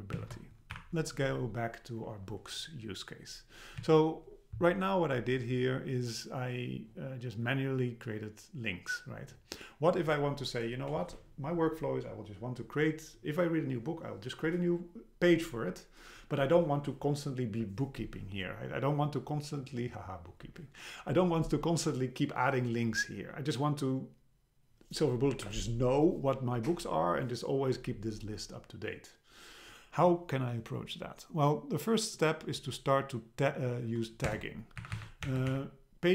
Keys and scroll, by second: 0.8 BackSpace, 3.8 Down, 34.3 Return, 34.8 Up, 35.3 Return, 35.5 Up.